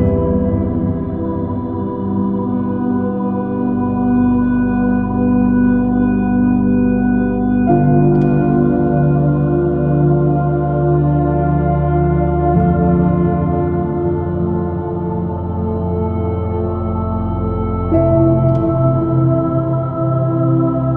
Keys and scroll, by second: 1.9 space, 5.1 space, 13.5 space, 14.1 super+i, 14.5 super++, 16.2 super+z, 20.5 space.